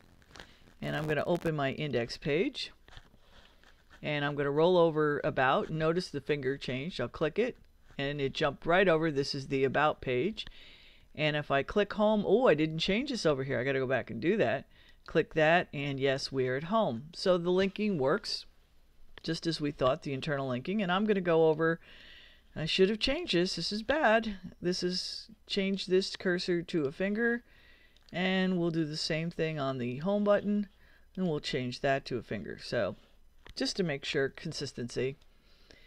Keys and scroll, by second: 33.0 super+s.